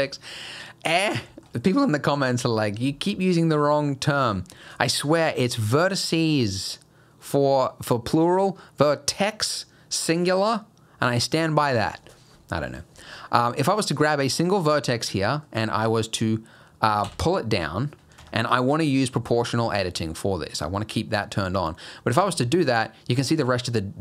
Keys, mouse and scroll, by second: 0.1 shift+middle click, 0.9 middle click, 1.3 shift+middle click, 4.2 click, 14.5 middle click, 17.1 g, 19.0 click, 22.1 g.